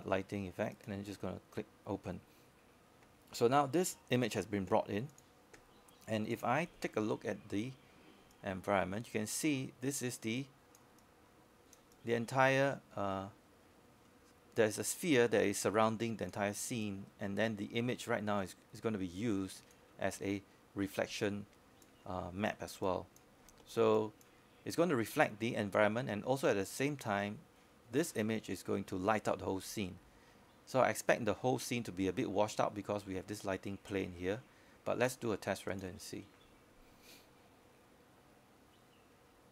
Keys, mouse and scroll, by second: 12.7-14.1 scroll down 1, 14.2-16.7 alt+drag, 17.9-22.3 alt+drag, 26.2-27.1 scroll up 1, 27.3 alt+click, 28.1 scroll up 1, 28.6 alt+middle click, 29.5 scroll down 1, 29.7 alt+middle click, 30.2 alt+click, 30.6-38.4 scroll up 1, 38.4-39.5 scroll down 1.